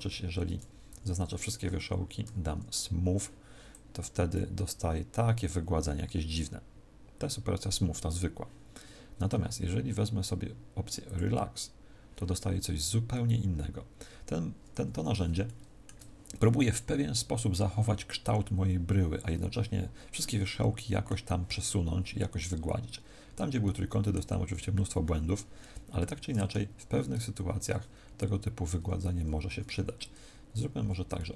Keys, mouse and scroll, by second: 0.0 ctrl+z, 0.8 a, 2.2 w, 3.6 click, 11.0 click, 13.0 middle click, 15.4 shift+middle click, 20.1 middle click, 23.6 middle click, 25.5 middle click, 27.2 ctrl+z, 30.7 b.